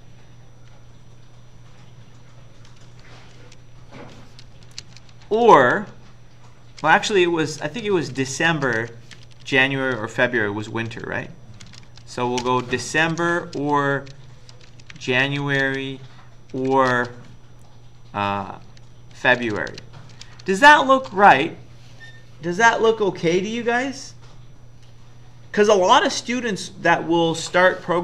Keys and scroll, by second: 2.7 Down, 2.9 Down, 4.8-6.0 typing, 7.5 Left, 7.7 Left, 7.8-8.5 typing, 9.1 Delete, 9.3 Delete, 9.5 Delete, 11.3-12.5 typing, 13.0 End, 13.6-21.0 typing.